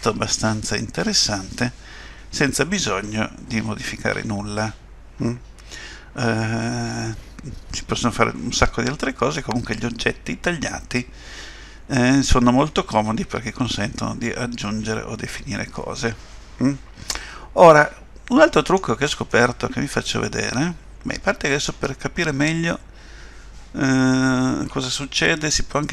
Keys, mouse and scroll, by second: 19.3 middle click.